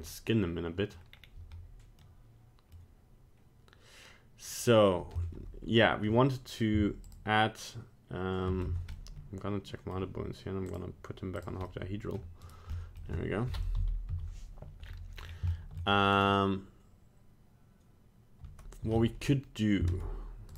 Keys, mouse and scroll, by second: 0.2 middle click, 0.9 middle click, 1.1 scroll down 2, 2.0 middle click, 2.6 middle click, 5.2 middle click, 7.0 shift+click, 8.7 Tab, 8.9 middle click, 10.6 click, 11.6 middle click, 12.4 right click, 12.7 middle click, 12.7 middle click, 13.0 middle click, 13.7 KP_1, 14.0 KP_3, 14.8 scroll up 3, 15.1 scroll down 4, 15.5 shift+middle click, 16.1 right click, 19.0 middle click, 19.1 middle click, 19.8 ctrl+Tab.